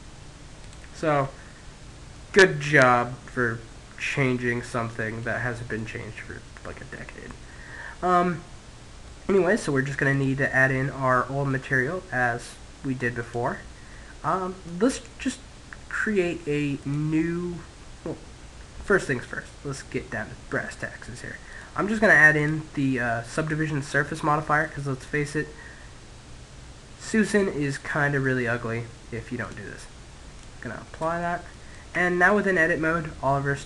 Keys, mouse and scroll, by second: 1.5-3.7 middle drag, 4.5-7.8 middle drag, 8.3 middle click, 9.2 click, 12.3 click, 15.9 click, 18.5-19.9 middle drag, 20.6-23.3 drag, 24.7-25.7 middle drag, 26.5-28.5 middle drag, 28.5-31.4 drag, 31.0 Tab, 31.3-33.5 middle drag.